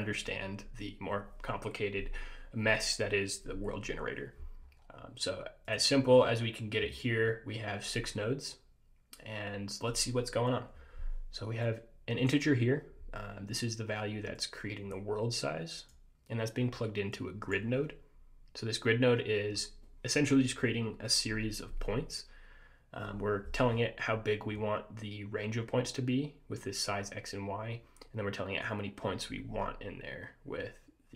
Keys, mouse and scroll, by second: 4.7-5.8 scroll up 2, 5.8 click, 6.2-7.8 scroll up 2, 11.8 click, 14.5 click, 17.3 click, 19.6 scroll up 2.